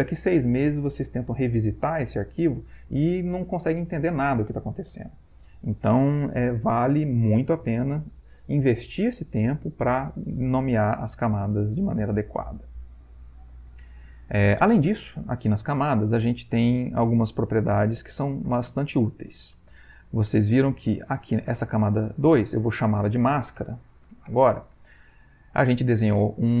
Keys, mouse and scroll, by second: 21.4 click, 21.9 click, 22.5 click, 23.3-24.6 typing.